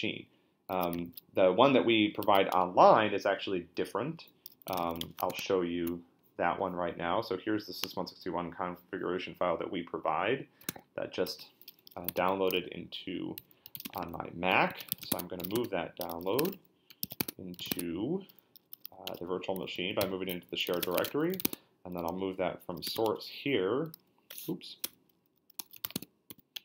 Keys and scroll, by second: 1.0 shift+;, 2.2 q, 2.5 Return, 4.4-5.5 typing, 10.7 Tab, 13.4-18.2 typing, 19.1 Return, 20.0 ctrl+d, 20.4-22.9 typing, 23.1 Return, 24.5 Up, 24.8-26.6 typing.